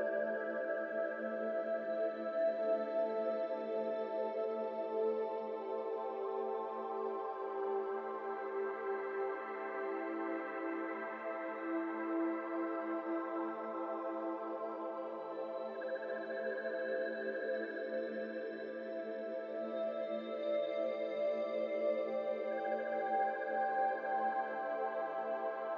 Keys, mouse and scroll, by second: 1.3 Tab, 2.1 click, 3.6 click, 5.4-6.8 drag, 6.8 middle click, 7.6-10.0 drag, 10.0 scroll up 1, 11.1 click, 11.6 scroll up 2, 12.1 click, 14.2 click, 14.8 shift+middle click, 15.0 scroll up 1, 15.8 click, 16.2 click, 16.7 click, 17.1 click, 17.7 click, 18.7 click, 20.9 middle click, 21.5 Tab, 23.7 ctrl+s, 24.3-24.7 middle drag, 24.7-25.5 scroll up 2, 25.5 click.